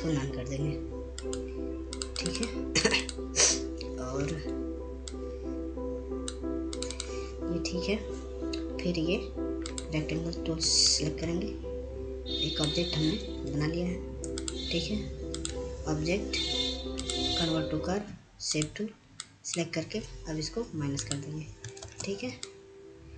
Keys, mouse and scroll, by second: 1.4 click, 2.9 right click, 3.6 click, 4.0 click, 6.0 F2, 6.8-9.3 drag, 11.5-22.9 drag, 23.0 ctrl+space.